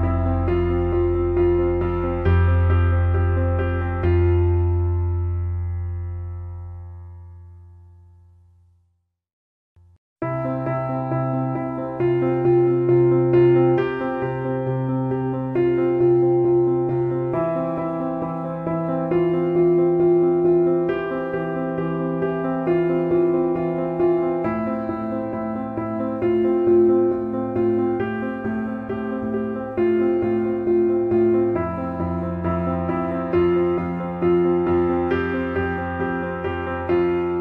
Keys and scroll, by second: 4.0 ctrl+d, 13.0 ctrl+alt+KP_0.